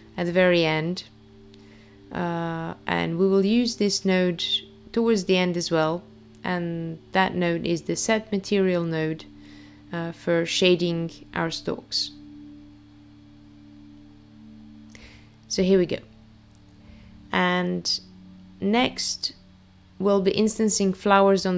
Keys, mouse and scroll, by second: 1.6 click, 3.9 click, 7.2 shift+a, 13.8 click.